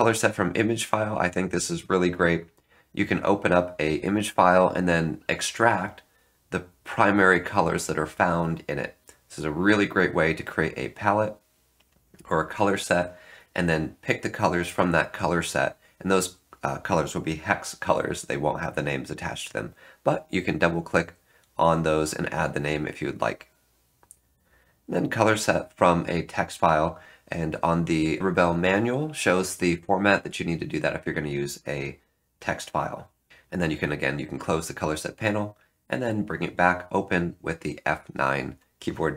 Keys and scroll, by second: 28.2 alt+Tab.